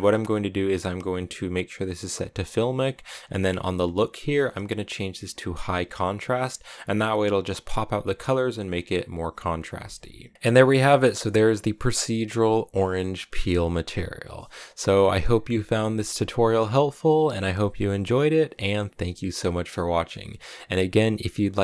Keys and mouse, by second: 2.0 click, 4.1-6.2 drag, 8.1 middle click, 9.8 z.